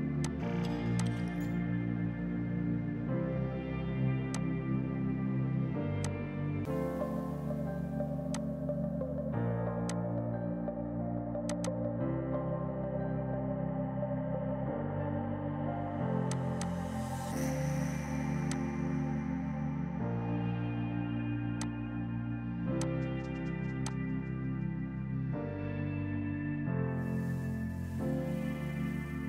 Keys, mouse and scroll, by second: 3.1 ctrl+u, 4.4 click, 5.6 F3, 6.1 click, 6.3 right click, 8.4 click, 9.4 shift+F4, 9.9 click, 12.3 space, 14.9 right click, 16.2 click, 17.7 g, 18.6 click, 21.7 click.